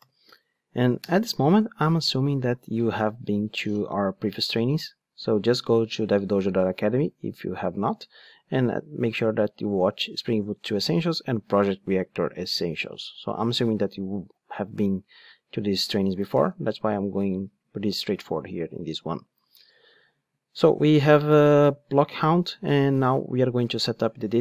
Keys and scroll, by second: 0.0 alt+super+v.